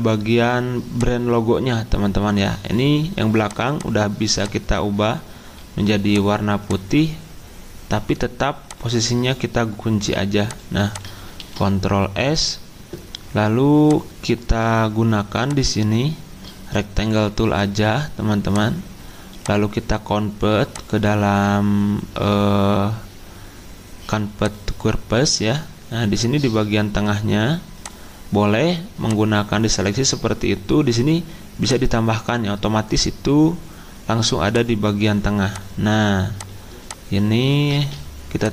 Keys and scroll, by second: 11.4 ctrl+s, 37.7 ctrl+z.